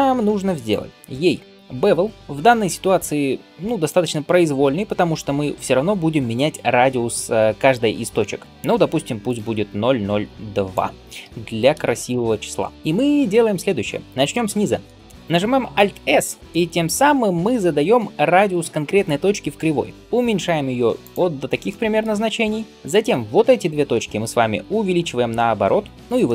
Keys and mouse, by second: 3.9-12.7 drag, 12.7-23.9 middle drag, 15.7 alt+s, 23.9-26.0 alt+drag, 24.1 alt+s, 26.0-26.3 shift+middle drag.